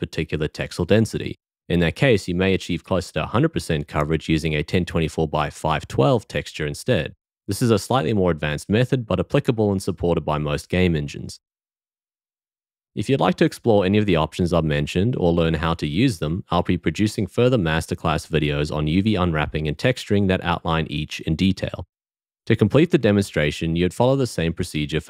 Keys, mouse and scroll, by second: 23.0 Escape.